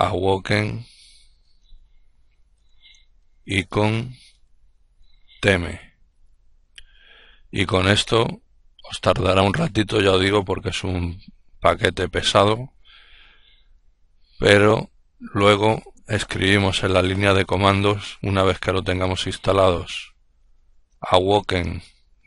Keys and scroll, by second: 0.0-6.6 typing, 19.5-22.2 typing.